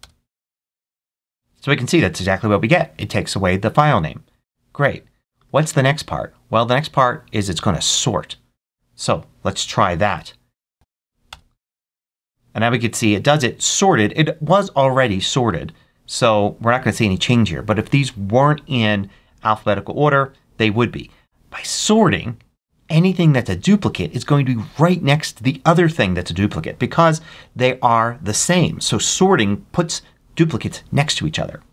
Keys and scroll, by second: 10.0 Up, 10.7 t, 11.2 Return.